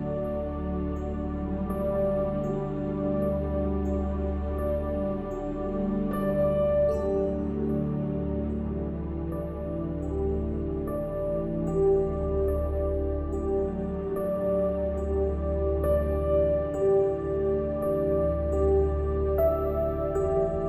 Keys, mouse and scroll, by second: 0.3 middle click, 0.9 ctrl+r, 2.1 ctrl+r, 3.1 ctrl+r, 4.2 Tab, 4.7 middle click, 5.1 Tab, 5.5 ctrl+r, 6.3 Tab, 6.9 Tab, 7.4 click, 8.1 s, 9.1 Tab, 9.3 click, 9.7 Tab, 9.9 click, 10.2 e, 11.2 s, 11.8 ctrl+r, 12.6-13.0 scroll up 1, 13.0-14.0 middle drag, 14.2 scroll up 1, 14.5 middle click, 14.9 ctrl+r, 16.8-18.2 drag, 17.9 e, 18.7 ctrl+b, 20.4 Tab.